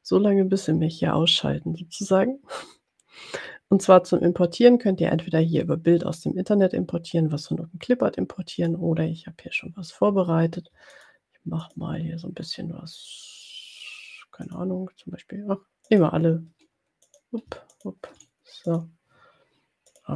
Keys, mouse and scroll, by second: 8.8 click, 11.0 shift+click, 12.0 shift+drag, 14.5 shift+click, 16.1 shift+click, 17.2 click, 17.7 shift+click, 18.7 click.